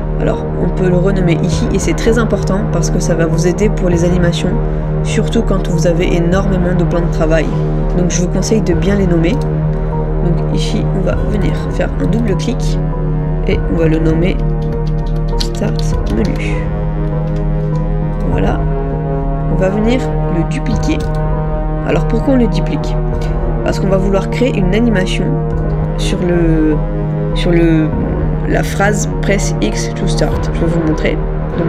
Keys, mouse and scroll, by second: 9.4 right click, 11.6 double click, 15.1-17.3 typing, 25.1 middle click.